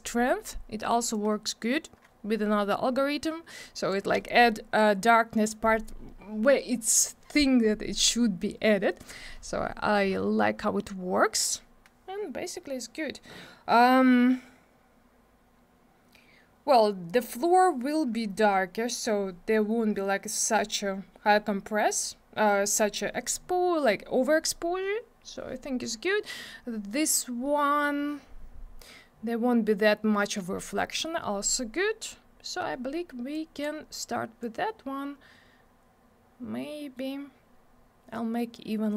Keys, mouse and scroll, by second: 1.1 click, 33.3 click, 34.4 click.